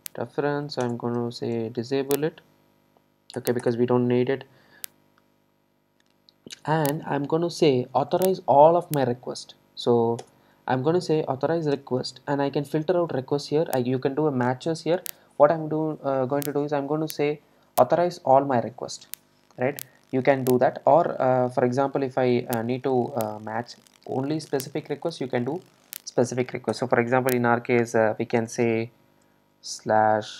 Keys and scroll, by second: 10.3 Return, 26.8 Return.